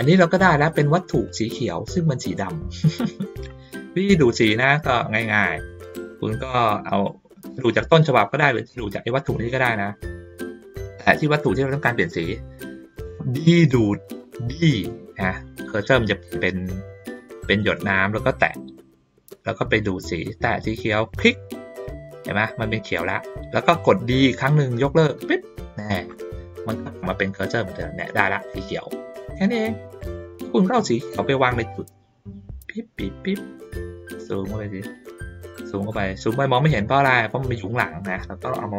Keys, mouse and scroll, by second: 0.2 middle click, 1.2 click, 1.9-3.4 drag, 3.9 ctrl+middle click, 4.6 middle click, 5.6 middle click, 7.0-8.2 drag, 8.8 ctrl+middle click, 9.7 middle click, 10.5 ctrl+middle click, 10.6 ctrl+scroll down 1, 10.9 ctrl+middle click, 11.5 click, 21.2 click, 27.8-29.2 drag, 29.5 ctrl+middle click, 30.1 middle click, 31.0-33.3 drag, 34.2-36.7 ctrl+middle drag.